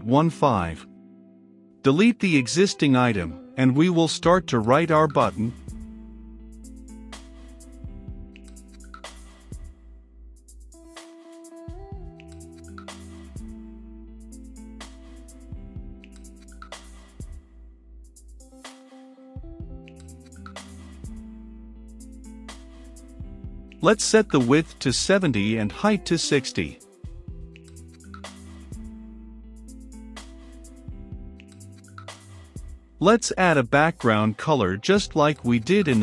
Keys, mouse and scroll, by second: 5.6-8.3 typing, 8.7 Return, 9.9 click, 10.5 n, 11.5-12.8 drag, 12.8 Return, 13.7 i, 13.8 d, 14.7 shift+/, 16.2-17.5 typing, 18.7 g, 18.9 l, 20.3 Down, 20.9 Return, 21.2-21.9 typing, 22.4 Return, 22.7 ctrl+space, 23.4 Down, 24.8 Return, 27.1-28.5 typing, 27.5 Return, 29.2 ctrl+space, 29.8 Down, 30.9 Return, 35.1-36.0 drag.